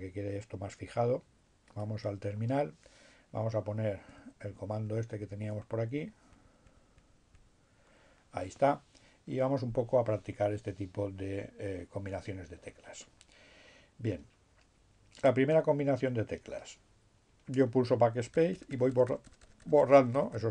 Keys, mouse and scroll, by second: 0.3-2.5 drag, 3.5 Up, 16.4 BackSpace.